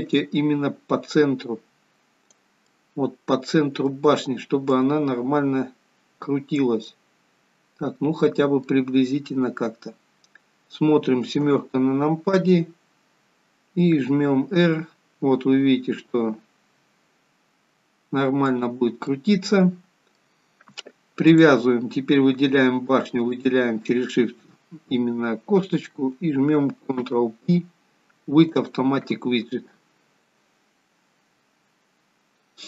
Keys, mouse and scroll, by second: 0.2 click, 2.7 middle click, 4.8 click, 7.0 middle click, 11.4 KP_7, 14.0 r, 19.1 middle click, 21.4 click, 23.3 shift+click, 26.9 ctrl+p.